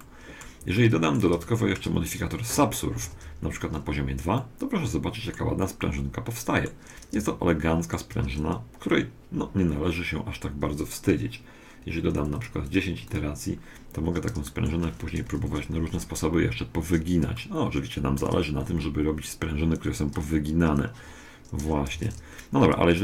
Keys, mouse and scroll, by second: 3.1 ctrl+2, 3.5 middle click, 3.5-3.9 scroll up 1, 4.5-9.1 middle drag, 12.2-15.0 drag, 14.5-16.3 middle drag, 15.3 KP_1, 16.3 middle click, 17.3-19.1 middle drag, 21.9 Tab.